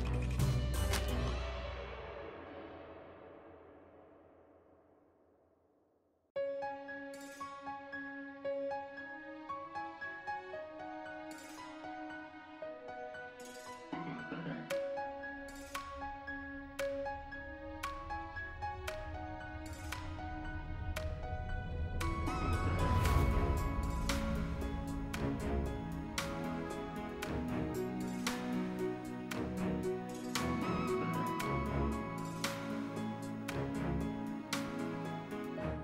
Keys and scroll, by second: 1.0 s, 16.9 s, 26.0 s, 27.7 s, 28.5 s, 31.7 s, 33.2 s, 34.1 s.